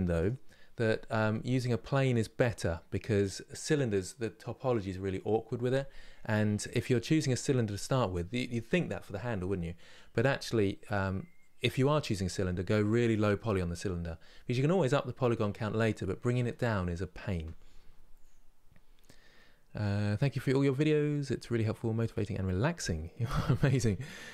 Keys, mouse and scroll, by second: 1.2-4.3 middle drag.